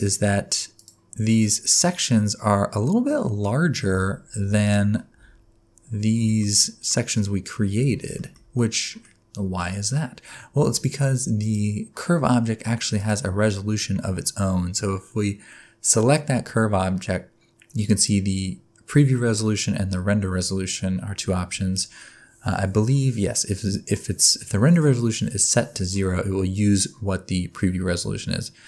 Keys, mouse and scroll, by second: 0.0-0.7 scroll up 2, 0.7 click, 1.1-2.7 scroll up 2, 2.8-3.1 scroll down 2, 3.2 middle click, 3.9 Tab, 4.4 Tab, 4.6 click, 5.1 Tab, 5.9 scroll up 1, 6.3 shift+middle click, 6.6 middle click, 7.8 Tab, 8.1 shift+middle click, 8.5 scroll down 1, 8.8 middle click, 9.1-9.4 scroll down 2, 10.7 click, 11.4 click, 12.9 click.